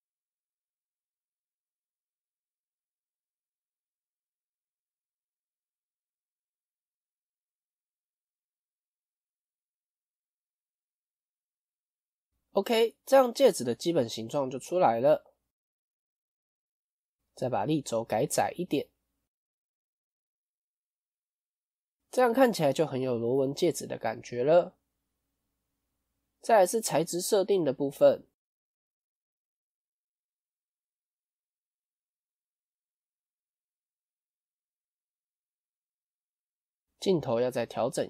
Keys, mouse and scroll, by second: 0.7 scroll down 1, 0.7-1.9 middle drag, 1.9 click, 2.7 alt+click, 6.3-8.8 drag, 8.8 middle click, 9.3 click, 9.6-10.9 middle drag, 10.9 Tab, 11.2-14.6 middle drag, 14.6 KP_1, 17.5-20.4 drag, 20.4-20.8 scroll up 1, 20.8-22.7 middle drag, 22.7 KP_1, 24.8-26.3 middle drag, 29.3 click, 34.3 KP_0.